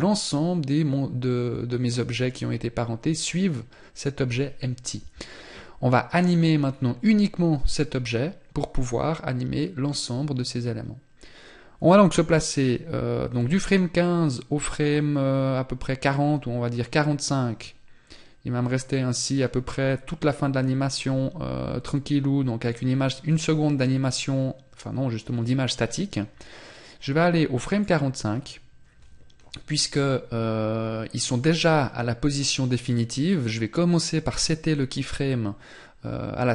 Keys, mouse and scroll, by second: 6.0-9.2 scroll up 3, 16.1 click.